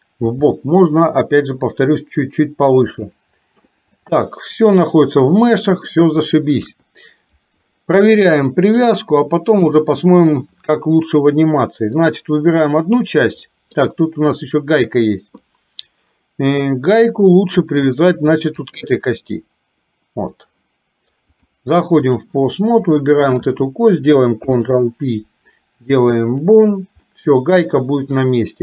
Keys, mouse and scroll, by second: 0.4 g, 3.6-5.9 middle drag, 6.6 KP_1, 9.0 click, 12.0 click, 13.4 middle click, 14.4 click, 15.5-17.0 middle drag, 18.8 shift+click, 21.4-22.4 drag, 22.9 click, 24.4 ctrl+p, 27.1 middle click.